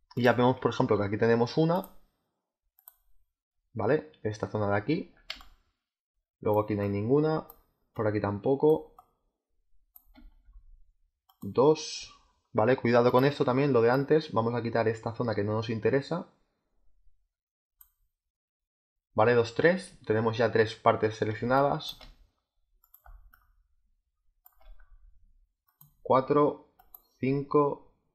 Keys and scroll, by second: 5.2 space, 21.3 space.